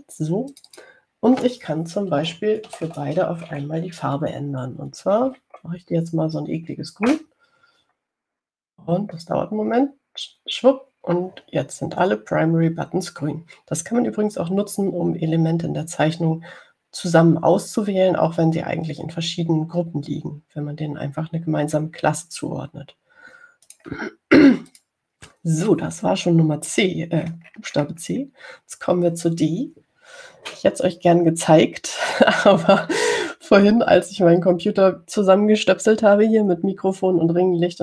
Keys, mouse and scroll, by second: 1.7 click, 3.9 BackSpace, 6.3 1, 8.3 Return, 24.9 click, 25.9 click, 28.4-30.1 scroll down 5, 30.6 scroll up 1.